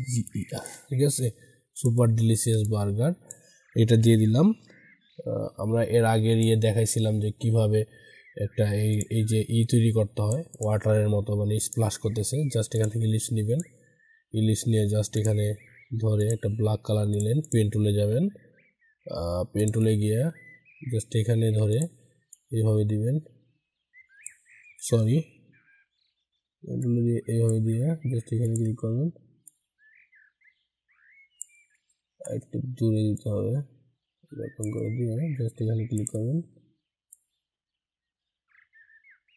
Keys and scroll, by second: 24.6 ctrl+z, 31.7 ctrl+z.